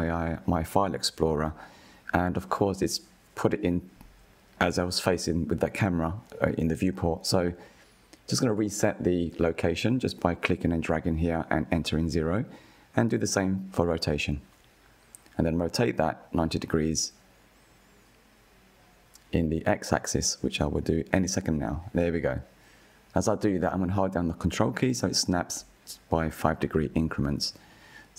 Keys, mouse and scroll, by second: 0.2-1.8 middle drag, 1.8 click, 3.6 Delete, 4.1-5.1 middle drag, 5.1 click, 5.7 Delete, 6.1 click, 6.7-7.3 middle drag, 7.3-8.5 scroll up 2, 8.5 click, 10.6-16.2 drag, 16.2-17.4 middle drag, 17.4-17.8 drag, 17.8-19.0 middle drag, 19.0 click, 19.4 middle click, 20.0 click, 21.7 click, 22.1-23.8 middle drag, 23.8 click, 26.8 KP_1, 27.6 shift+middle click.